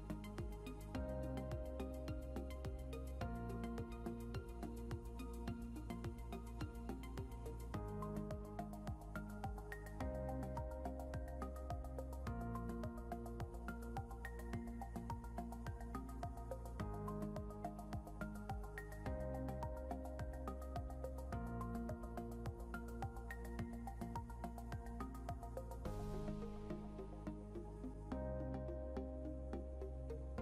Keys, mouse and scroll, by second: 3.7 scroll up 1, 5.9 scroll up 1, 7.2 click, 7.7 scroll down 1, 8.9 click, 14.8 click, 22.4 scroll up 1, 23.2 ctrl+click, 24.8 ctrl+c, 27.6 click, 28.8 ctrl+v, 29.6 scroll down 1.